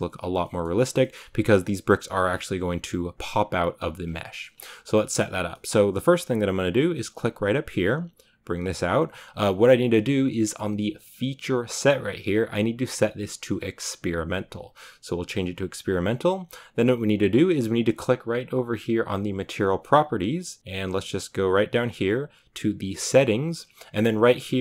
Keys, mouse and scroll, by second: 0.3 middle click, 0.6 scroll up 1, 1.1 scroll up 1, 3.9-4.2 scroll down 3, 4.2 middle click, 4.3-4.8 scroll up 2, 4.8 shift+middle click, 5.3 scroll down 2, 5.4-14.1 middle drag, 14.1-14.8 drag, 19.5 click.